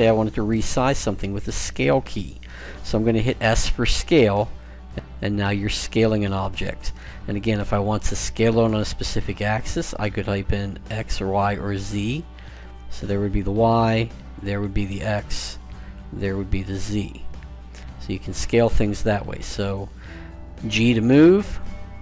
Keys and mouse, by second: 3.6 s, 20.4 g.